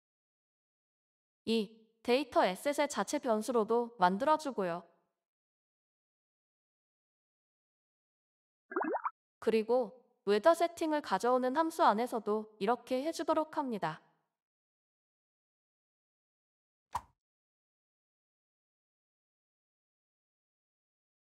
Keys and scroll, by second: 19.7 typing.